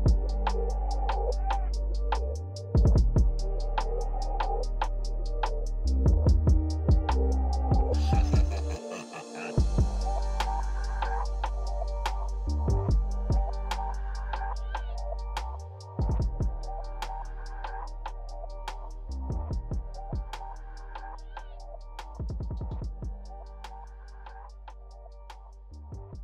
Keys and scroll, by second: 19.1 Delete.